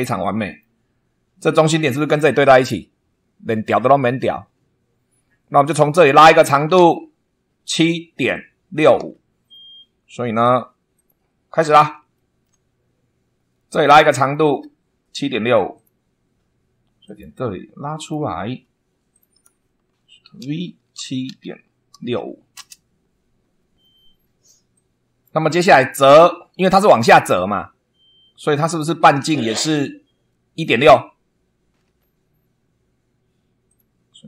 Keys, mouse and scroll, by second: 0.8-1.2 scroll up 1, 8.9 super+2, 10.9 click, 11.5 scroll down 2, 12.1 shift+middle click, 12.3 shift+right click, 12.8 shift+scroll up 3, 13.8 scroll down 2, 14.2 shift+middle click, 15.7 click, 17.0 click, 17.9 click, 18.4 Escape, 19.0 click, 20.3-22.6 typing, 24.7 click, 31.8 super+2, 33.6 click.